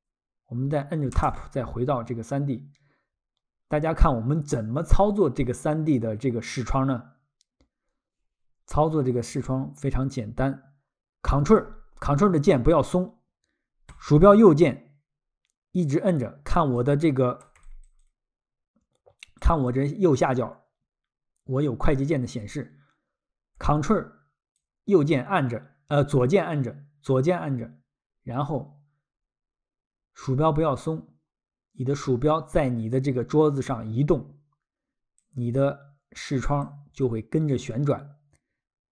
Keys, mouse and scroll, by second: 1.2 Tab, 13.9 ctrl+click, 15.8 ctrl+click, 16.8 ctrl+click, 17.7 ctrl+click, 18.0 ctrl+click, 19.7 ctrl+click, 22.3 ctrl+click, 24.6 ctrl+click, 35.2 ctrl+click, 35.6 ctrl+click, 37.0 ctrl+click.